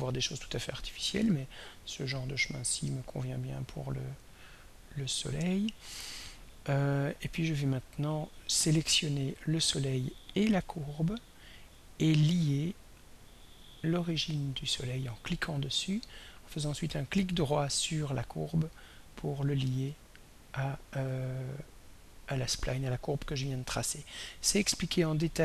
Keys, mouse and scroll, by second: 9.2 click, 10.9 ctrl+click, 13.6 click, 17.7 right click, 19.9 click.